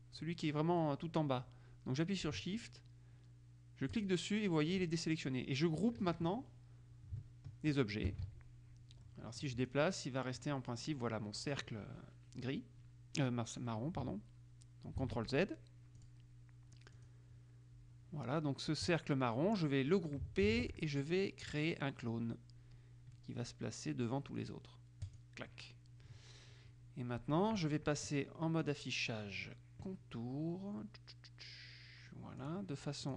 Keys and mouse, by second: 4.1 shift+click, 6.2 KP_Subtract, 8.2 ctrl+g, 9.2 click, 15.1 ctrl+z, 16.1 click, 17.1 click, 20.6 ctrl+g, 25.2 click, 28.8 click, 32.6-33.1 drag.